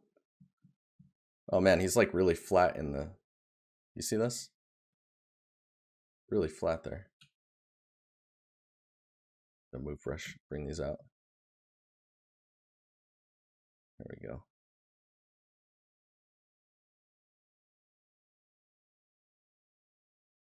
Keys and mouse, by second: 4.1 right click, 11.2 right click, 13.5 right click, 16.2 right click.